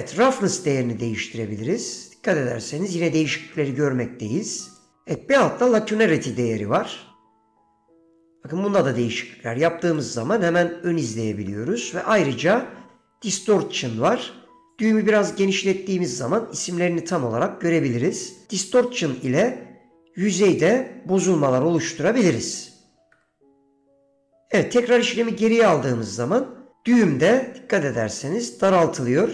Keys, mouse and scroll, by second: 0.6-4.9 drag, 6.5-10.1 drag, 11.5 ctrl+z, 14.9 click, 21.9-24.5 drag, 24.5 ctrl+z, 28.8 click, 29.1-29.3 drag.